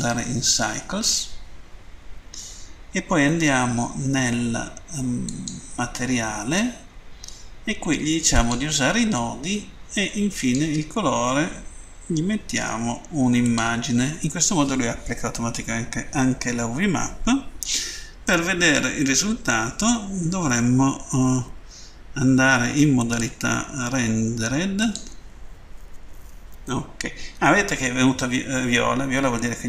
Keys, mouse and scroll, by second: 1.0 click, 3.3 middle click, 5.2 click, 8.2 click, 10.4 click, 13.4 click, 18.3-18.9 scroll up 2, 20.3 scroll down 1, 22.8 click, 24.8 click.